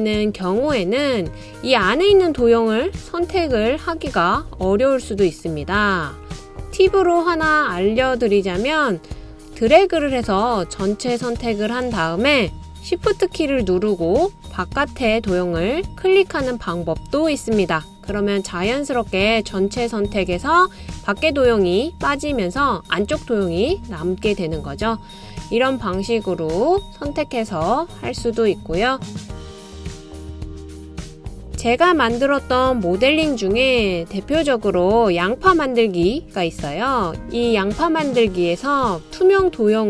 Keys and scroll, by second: 30.2 BackSpace.